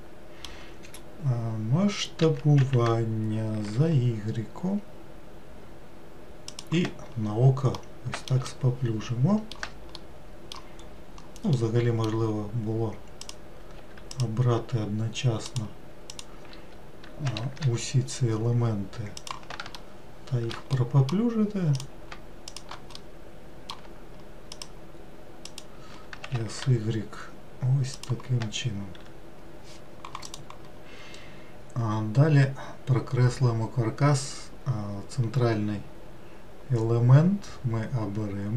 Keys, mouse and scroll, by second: 2.2 s, 7.2-7.8 scroll down 2, 7.8-10.8 middle drag, 10.8-11.6 scroll up 2, 11.6-13.2 middle drag, 13.2 click, 14.1 shift+click, 15.5 shift+click, 16.1 shift+click, 17.3 s, 19.8-21.8 shift+middle drag, 21.8 click, 22.5 shift+click, 23.0 scroll up 1, 23.1-24.6 middle drag, 24.6 shift+click, 25.5 shift+click, 26.3 s.